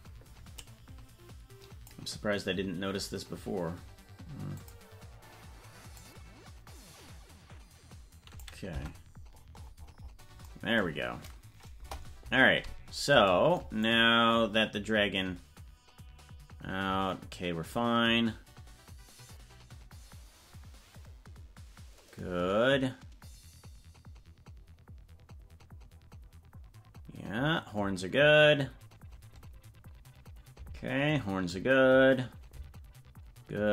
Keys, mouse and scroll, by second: 0.5-1.8 drag, 3.0 scroll up 4, 4.5 click, 5.9-8.4 drag, 8.7 Tab, 9.2-10.4 scroll down 21, 11.7 KP_0, 13.9-33.7 drag.